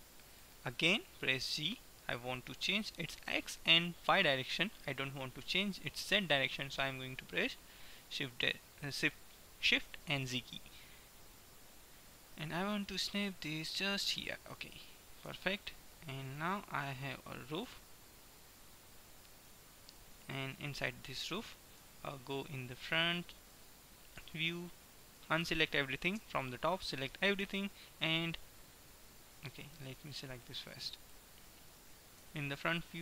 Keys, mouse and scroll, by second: 1.5 right click, 1.7 g, 14.3-18.5 middle drag, 15.3 Tab, 17.7 KP_1, 18.7-20.8 middle drag, 19.7 Tab, 21.8 KP_1, 24.3 a, 24.8 a, 25.3 a, 26.3 b, 27.7 middle click, 30.5-32.3 drag, 31.2-32.3 right drag, 32.3 KP_1, 32.5 right click, 32.7 click.